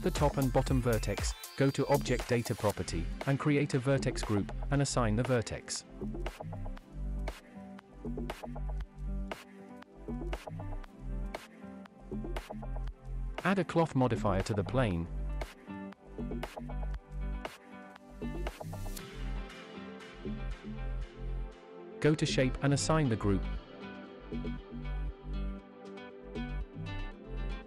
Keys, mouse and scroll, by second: 0.0 shift+click, 0.5 shift+middle click, 2.5 click, 4.5 click, 5.7 click, 7.3 Tab, 8.1 shift+middle drag, 9.0-9.6 middle drag, 11.4 click, 12.9 click, 14.1-14.7 scroll down 1, 14.8-15.4 scroll down 1, 15.4 scroll down 3, 16.1-16.7 scroll down 1, 16.7-17.9 scroll down 1, 17.9-20.7 scroll down 1, 21.4 click, 22.3-23.6 drag, 24.4-24.9 scroll down 3, 26.0 click, 26.4-27.6 scroll down 2.